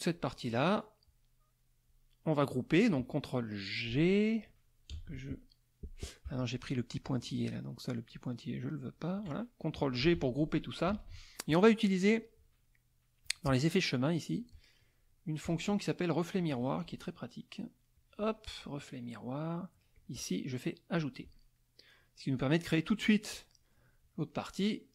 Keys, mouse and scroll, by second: 0.1-2.1 drag, 4.9 KP_Add, 8.1 shift+click, 10.0 ctrl+g, 10.9 KP_Subtract, 11.6 middle click, 13.2 click, 14.3 click, 15.4 click, 16.3 click, 18.0 click, 19.9 click, 20.9 click, 21.5 middle click, 24.3 middle click.